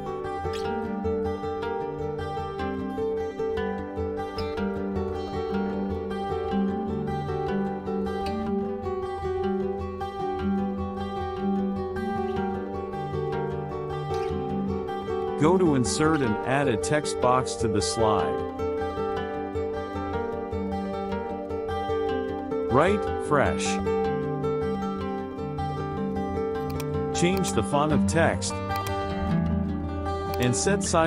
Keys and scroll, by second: 1.5 ctrl+d, 20.9 KP_Subtract, 22.0 Caps_Lock, 22.5 f.